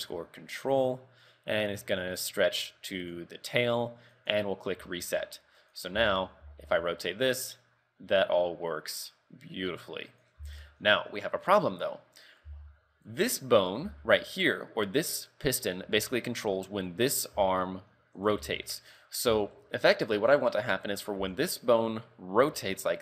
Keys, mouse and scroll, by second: 2.0 click, 4.2 click, 5.0 shift+middle click, 5.7 right click, 6.0 z, 6.5 r, 10.5 z, 10.7-11.5 scroll down 4, 11.5 right click, 11.9-12.2 scroll up 2, 12.5 z, 13.2 right click, 13.7 right click, 13.9 z, 17.0 right click, 17.4 r, 18.5 z, 18.8 shift+middle click, 19.3 z, 22.6 r.